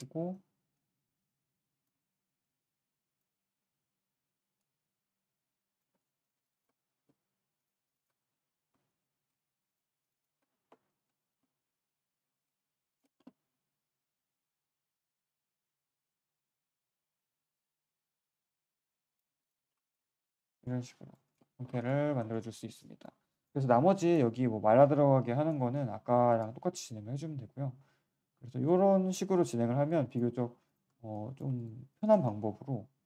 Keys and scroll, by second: 5.8 q, 19.3 q, 19.6 3, 30.8 1.